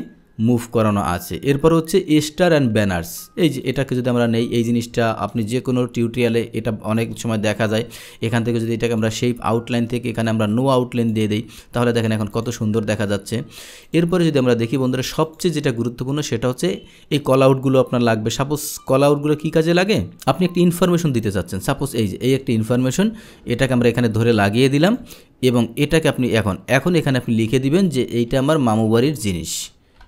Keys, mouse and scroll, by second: 3.7 click, 4.3-7.1 drag, 8.9 click, 11.0 click, 12.0 drag, 12.4 click, 13.9 drag, 15.3 click, 20.3 click, 21.3-22.5 drag, 23.7-25.0 drag, 26.3 click, 27.3 click, 27.8 right click, 29.1 click.